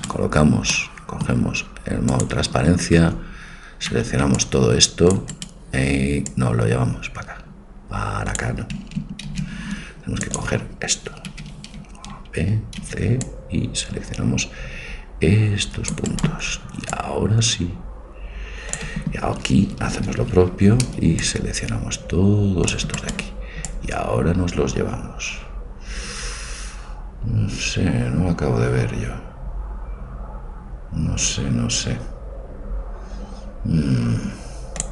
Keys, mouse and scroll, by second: 0.0 c, 0.9-2.1 middle drag, 2.1 click, 2.4-4.0 drag, 3.2 a, 4.0 c, 6.4-7.5 drag, 9.3 ctrl+z, 10.3-12.1 drag, 11.3 a, 13.0 c, 17.1 click, 19.9 a, 20.9 c, 23.7-25.5 drag.